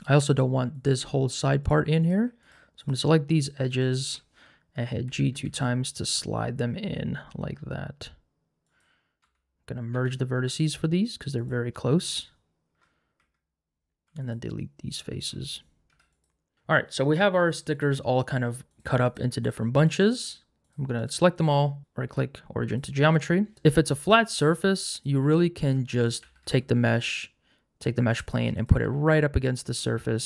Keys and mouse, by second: 0.8 alt+click, 2.0 click, 2.5 shift+click, 3.9 shift+click, 5.0 g, 5.3 g, 8.6 click, 9.2 1, 9.9 a, 10.4 m, 12.7 Tab, 13.2 Tab, 14.1 3, 14.2 click, 15.9 x, 16.5 Tab, 18.2 click, 18.7 click, 19.4 click, 19.8 click, 20.6 shift+click, 21.0 shift+click, 23.5 g, 23.5 z, 23.8 click, 25.3 g, 26.2 g, 26.4 z, 28.7 g, 28.9 z.